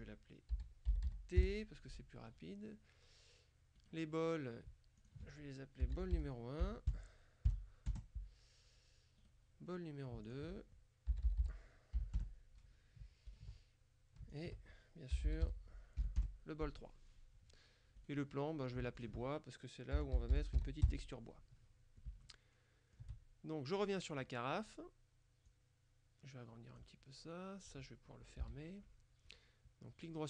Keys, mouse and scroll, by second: 0.6 t, 1.0 h, 1.1 e, 1.5 Return, 3.8 right click, 5.1 ctrl+click, 5.9 b, 6.1 o, 6.2 l, 6.7 KP_1, 8.0 KP_Enter, 9.3 right click, 10.3 ctrl+click, 11.2 b, 11.3 o, 11.5 l, 12.3 KP_Enter, 13.3 ctrl+click, 14.4 ctrl+click, 15.2 b, 15.3 o, 15.5 l, 16.3 KP_Enter, 18.1 right click, 19.1 ctrl+click, 20.0 b, 20.3 o, 20.4 i, 20.7 s, 20.9 Return, 22.3 shift+click, 22.9 shift+middle click, 24.2 right click, 25.5-27.3 drag, 28.5 t, 29.3 right click.